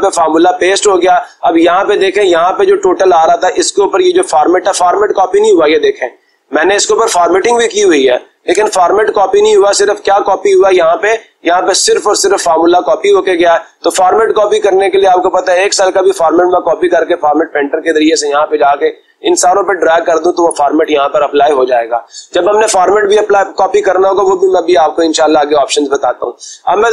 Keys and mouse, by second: 2.2-3.3 drag, 5.5 click, 6.7-7.7 drag, 15.0-16.1 drag, 17.1 click, 19.8-20.8 drag, 25.7 click, 26.3 click.